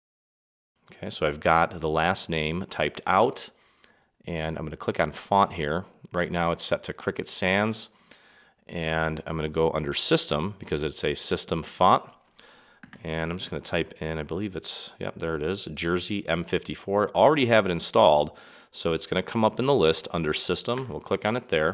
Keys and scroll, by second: 12.8 5, 14.0 4.